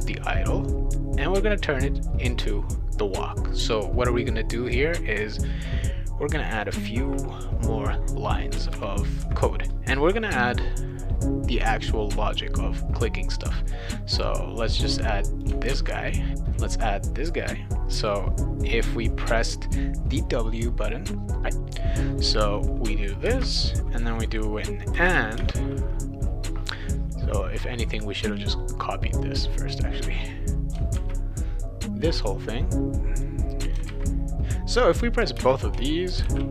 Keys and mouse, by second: 6.5 click, 8.6 Return, 14.1-15.4 drag, 15.7 ctrl+c, 23.2 space, 24.9 shift+7, 25.1 shift+7, 25.4 space, 29.2-30.7 drag, 30.9 ctrl+c, 33.2 click, 33.9 ctrl+v, 35.4 space, 36.2 shift+[.